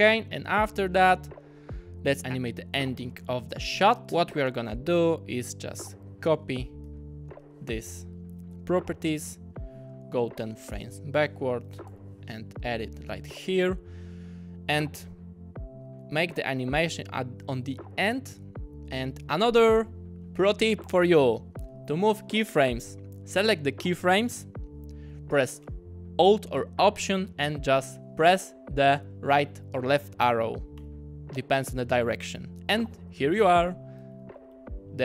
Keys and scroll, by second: 6.9 super+c, 7.3 super+v, 10.4 shift+q, 11.7 super+c, 11.9 super+v, 30.8 alt+Right, 34.2 alt+Left.